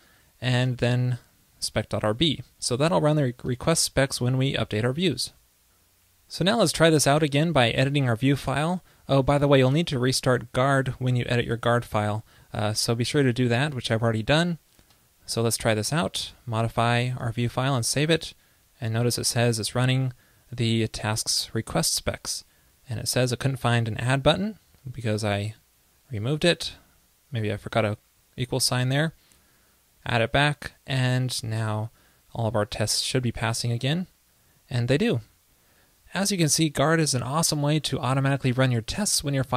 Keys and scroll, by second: 5.4 super+s, 17.5 super+s, 30.9 super+s.